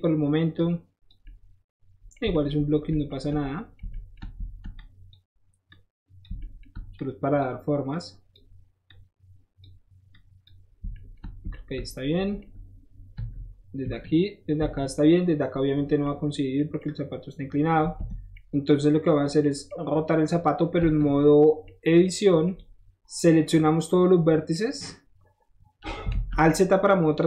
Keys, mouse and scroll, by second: 0.5 click, 1.2 middle click, 4.7 shift+click, 5.7 shift+click, 6.9 shift+click, 7.9 shift+click, 8.8 shift+click, 10.1 click, 11.2 scroll up 1, 11.7 scroll up 1, 13.1 KP_1, 13.8 KP_3, 14.5 KP_1, 15.7 middle click, 16.5 middle click, 16.7 middle click, 18.1 middle click, 18.2-19.0 scroll down 1, 19.0-20.4 middle drag, 20.6 middle click, 20.9 Tab, 21.2 middle click, 22.2 middle click, 22.5 click, 24.5-25.9 middle drag, 26.3-27.2 middle drag.